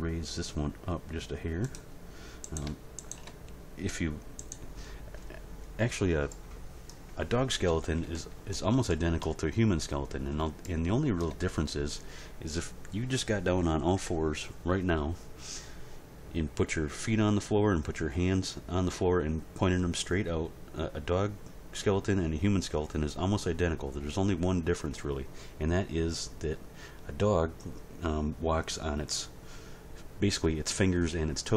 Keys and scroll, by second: 7.7 End, 8.0 Page_Down.